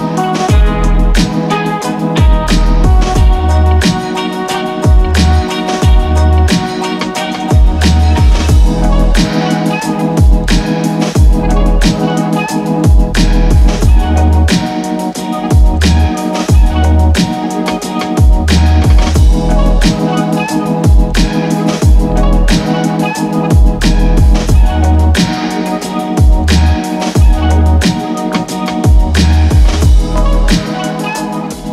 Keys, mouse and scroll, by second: 1.8 c, 2.2-31.2 drag, 31.3 click.